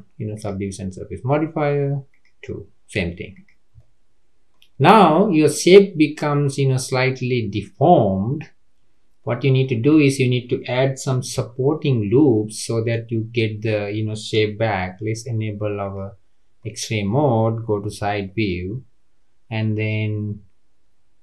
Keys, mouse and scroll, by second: 0.7-3.4 drag, 3.7-4.7 middle drag, 4.7-5.0 scroll down 2, 5.0-8.7 middle drag, 8.7-9.0 scroll up 2, 9.0 scroll down 1, 9.2-9.9 middle drag, 9.9 click, 11.3 Tab, 12.4-15.4 middle drag, 15.8 click, 16.6-17.8 middle drag, 17.8 KP_3.